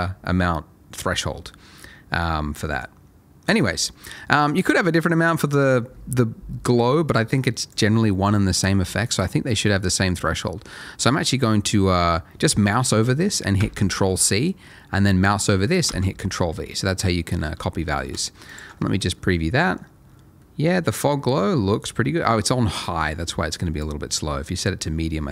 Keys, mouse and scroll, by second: 0.1 scroll up 1, 2.1 middle click, 4.6 click, 8.0 middle click, 14.0 middle click, 15.8 ctrl+v, 17.7 middle click, 18.5 ctrl+shift+click, 19.1 middle click, 19.9-20.4 scroll down 1, 20.4 middle click, 20.6 scroll up 1, 22.8 click, 24.4 middle click.